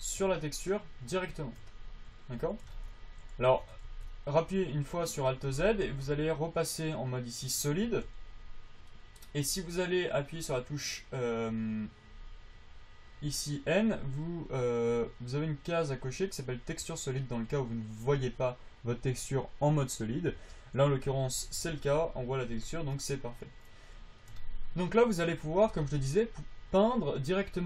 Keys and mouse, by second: 3.0 alt+z, 3.7 alt+z, 4.2 alt+z, 5.8 alt+z, 6.2 alt+z, 8.2 n, 17.1 n, 20.2 n, 20.6 n, 21.4 alt+z, 21.9 alt+z, 25.6-27.6 drag.